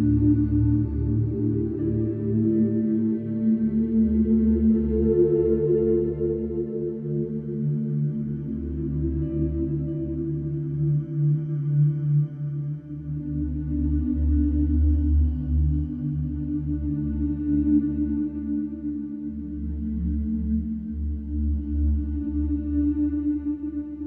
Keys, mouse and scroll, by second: 1.8-6.7 drag, 9.1 g, 16.8 click, 19.2-24.0 drag.